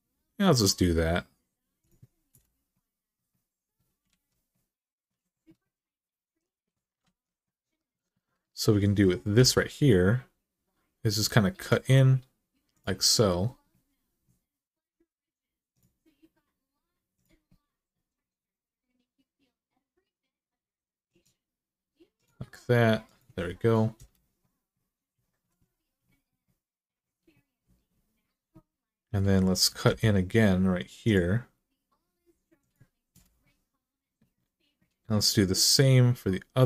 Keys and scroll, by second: 2.1 Return, 3.9 alt+z, 6.8 alt+z, 9.1 k, 23.7 Return, 29.7 k, 32.9 Return.